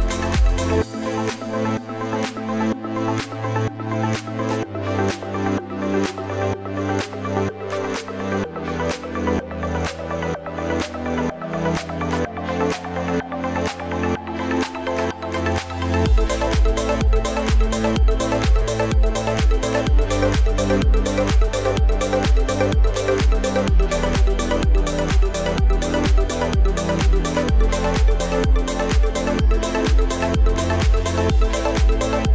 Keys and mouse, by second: 14.1 right click, 19.3 KP_Subtract, 19.9 KP_Subtract, 23.2 KP_Subtract, 23.2 e, 28.1 z, 30.0 KP_5, 31.0 KP_0.